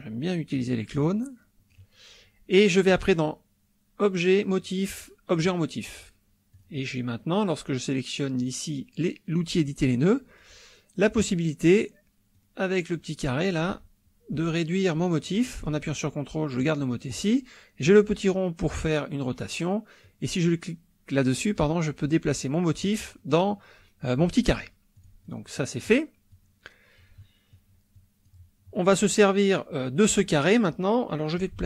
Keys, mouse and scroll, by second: 1.0-1.9 drag, 2.9 click, 5.3 click, 6.6 click, 12.3-17.3 drag, 17.8-19.5 drag, 20.0-23.0 drag, 24.9-25.5 drag, 25.5 middle click, 25.9 click, 26.3 click, 27.6 click, 27.9 click.